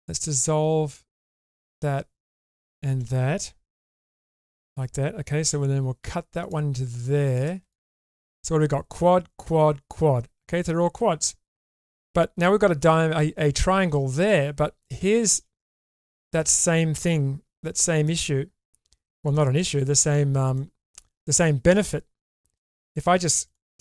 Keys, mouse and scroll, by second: 1.5 shift+click, 2.4 shift+click, 3.9 ctrl+x, 5.5 k, 7.7 click, 11.2 shift+middle click, 14.8 shift+middle click, 15.6 middle click, 20.5 middle click.